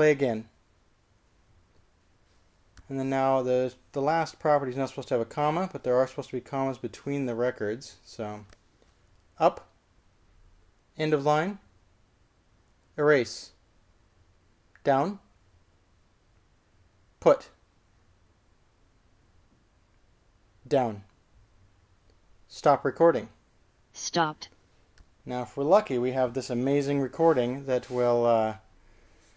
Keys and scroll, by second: 1.2 typing, 10.4 k, 12.3 shift+4, 14.3 x, 16.0 j, 18.5 p, 21.7 j, 24.1 q.